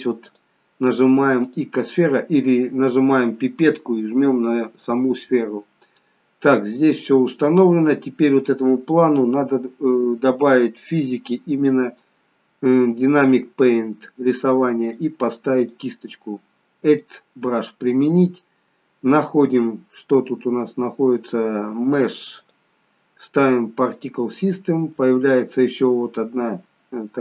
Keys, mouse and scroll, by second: 0.3 click, 10.7 click, 13.2 click, 14.8 click, 16.9 click, 17.5-19.9 scroll down 7, 19.9 scroll down 2, 20.1-20.5 scroll up 1, 20.5-22.4 scroll down 3, 22.4 click, 24.9-25.4 scroll down 3.